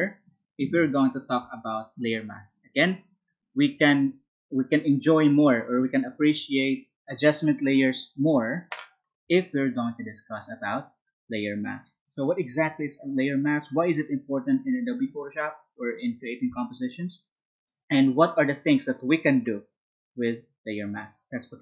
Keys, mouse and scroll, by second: 4.0 Up, 9.3 Down.